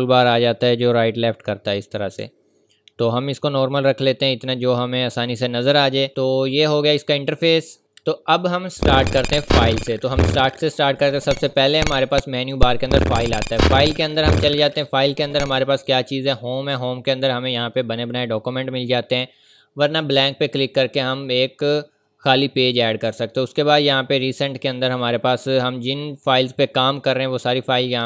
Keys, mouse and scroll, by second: 2.3-2.8 ctrl+scroll down 2, 3.4-5.7 scroll up 1, 12.3 click, 23.3 scroll down 1, 26.7 scroll up 1.